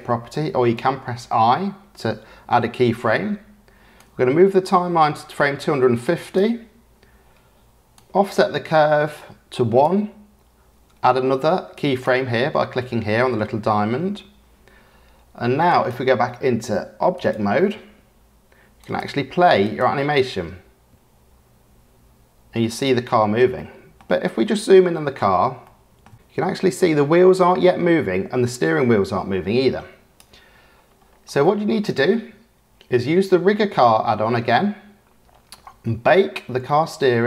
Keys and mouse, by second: 4.0-6.3 drag, 8.0-9.9 drag, 11.7 click, 15.7-17.3 drag, 18.8 click, 19.7 click, 23.5-23.9 middle drag, 25.6-26.0 shift+drag, 26.1-30.1 drag, 26.1 space, 31.4 click, 31.7 middle click.